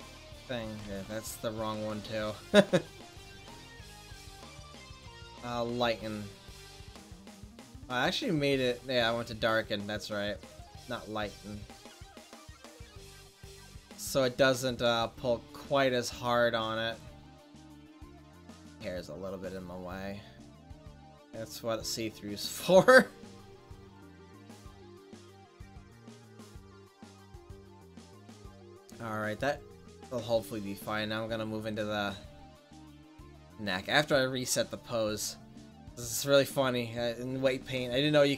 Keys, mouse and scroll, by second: 0.1 click, 1.2 ctrl+z, 7.5 ctrl+z, 10.7-13.4 drag, 13.8 drag, 14.0-17.4 right drag, 17.4 click, 17.6 right click, 17.9 middle click, 19.8-20.2 drag, 19.8-20.6 middle drag, 20.2 right click, 21.7-22.2 drag, 22.2-23.4 middle drag, 24.1-26.0 drag, 26.0 right click, 26.2 middle click, 27.7 right click, 27.9 click, 28.4 right click, 28.5 middle click, 29.4-30.7 drag, 30.7-31.1 middle drag, 31.1 click, 31.2 middle click, 31.3 click, 31.4 middle click, 31.5 click, 31.6 middle click, 31.8-33.7 drag, 35.0 click.